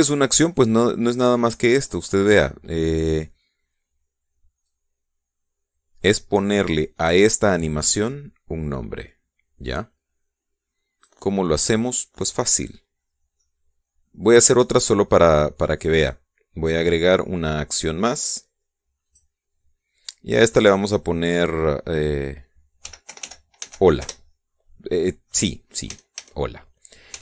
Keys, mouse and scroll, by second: 5.4-12.0 drag, 13.4-14.0 scroll down 2, 14.2-15.7 middle drag, 19.8 click, 21.2 click, 23.6 h, 23.8 o, 24.0 l, 24.4 a, 24.8 Return, 26.6 a.